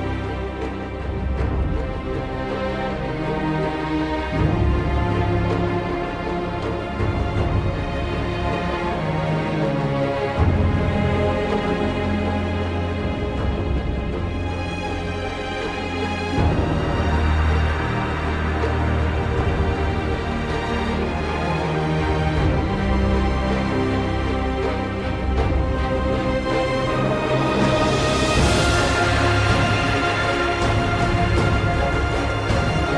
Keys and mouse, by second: 0.3 alt+middle click, 1.2-1.6 alt+middle drag, 1.8 alt+shift+middle click, 2.7 click, 2.8 alt+shift+middle drag, 3.2 click, 3.3 click, 3.7 click, 3.8 middle click, 4.2 alt+middle click, 4.3 alt+Tab, 4.3 alt+middle click, 5.0 Tab, 5.0 click, 5.4 alt+middle click, 5.5 Tab, 5.8 alt+middle click, 5.8 Tab, 6.0 click, 6.2 Tab, 6.3 click, 6.6 alt+middle click, 6.9 click, 7.5 click, 8.0 alt+middle click, 8.1 click, 8.3 click, 8.5 click, 8.7 Tab, 8.8 alt+middle drag, 8.9 alt+middle click, 9.3 click, 9.5 alt+middle click, 9.8 click, 9.9 alt+middle drag, 10.6 alt+shift+KP_1, 10.6 alt+shift+middle click, 12.0 c, 12.4 alt+shift+middle click, 12.6 shift+middle click, 12.8 alt+shift+middle click, 13.1 alt+middle click, 13.6 KP_7, 13.8 alt+shift+middle click, 13.9 e, 14.1 click, 14.8 KP_3, 14.9 shift+middle click, 15.0 alt+shift+middle click, 15.2 click, 15.5 shift+middle click, 15.7 alt+shift+middle click, 16.0 shift+middle click, 16.3 alt+shift+middle click, 16.4 alt+shift+middle click, 16.9 click, 16.9 e, 17.3 click, 17.7 click, 18.3 alt+shift+middle click, 19.0 alt+middle click, 19.3 alt+middle drag, 19.6 click, 19.8 middle click, 20.3 Escape, 20.3 click, 20.3 w, 20.7 click, 20.9-21.6 alt+middle drag, 21.8 click, 22.2 middle click, 22.6 ctrl+alt+middle click, 22.7 ctrl+z, 22.7 ctrl+middle click, 23.5 alt+shift+middle click, 24.0 alt+shift+middle click, 24.3 click, 24.5 alt+middle click, 24.7 alt+middle click, 25.0 click, 25.2 middle click, 25.3 click, 25.5 click, 25.7 shift+middle click, 26.1 click, 26.3 alt+shift+middle drag, 26.5 alt+shift+middle click, 27.0 click, 27.1 alt+shift+middle click, 27.5 click, 27.6 click, 27.7 alt+shift+middle click, 28.4 alt+middle drag, 28.7 click, 31.0 alt+shift+middle click, 31.4 alt+shift+middle click, 31.6 alt+shift+middle click, 32.1 click, 32.4 click, 32.7 click.